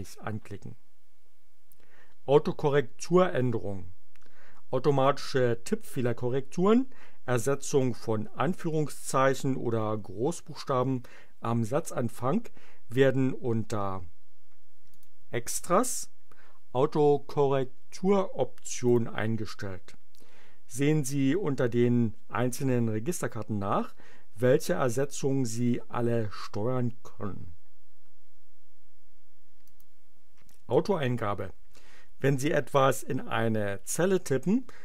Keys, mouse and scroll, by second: 14.9 click, 18.7 click, 29.7 click.